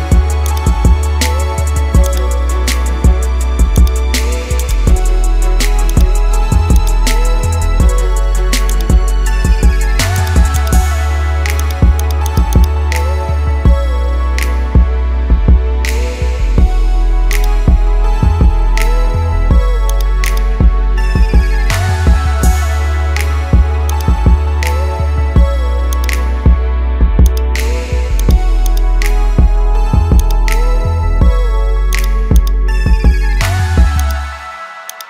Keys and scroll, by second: 17.8 ctrl+0.